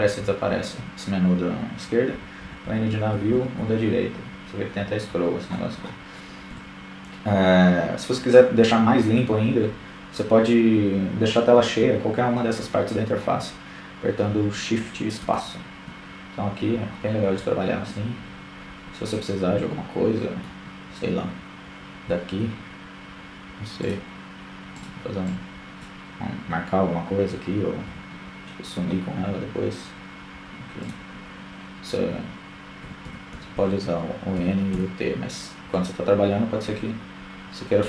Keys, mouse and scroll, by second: 2.8 middle click, 2.8 n, 11.5 shift+space, 13.0-15.8 middle drag, 20.5-23.0 drag, 30.7 n, 31.0 n, 31.6 n, 33.0-34.6 middle drag, 37.6 shift+space.